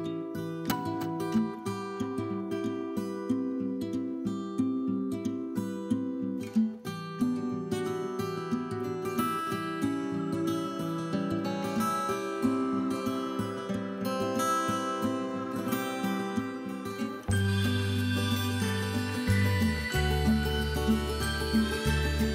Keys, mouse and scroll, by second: 0.4 scroll up 2, 0.6-1.1 scroll down 4, 0.7 middle click, 1.1-1.5 middle drag, 1.5 scroll up 2, 1.6-2.4 scroll down 2, 2.4-4.8 middle drag, 2.4 scroll up 1, 3.1 scroll down 1, 3.3 scroll up 1, 3.5 scroll down 1, 3.8 scroll up 1, 4.0 click, 4.8 shift+click, 4.9 scroll down 1, 5.0 middle click, 5.2 scroll up 1, 5.4 middle click, 6.1 click, 6.3-7.4 middle drag, 7.4 click, 7.7 middle click, 8.2 click, 8.9 g, 10.3 scroll down 1, 10.5-11.0 scroll up 2, 10.6 click, 10.7 middle click, 11.2 click, 11.4-12.9 middle drag, 11.6 scroll down 1, 11.9 scroll up 1, 12.1 scroll down 2, 12.5-12.9 scroll up 2, 12.9 click, 13.2 g, 14.2 click, 14.3 middle click, 14.4 scroll up 1, 14.5 middle click, 14.9 scroll down 1, 15.0 middle click, 15.2-16.0 drag, 16.0 k, 18.2 Return, 18.3 click, 18.5 scroll up 1, 18.6 middle click, 19.4 click, 19.5-20.8 right drag, 20.8 x, 21.4-22.3 middle drag, 22.1-22.3 scroll down 2.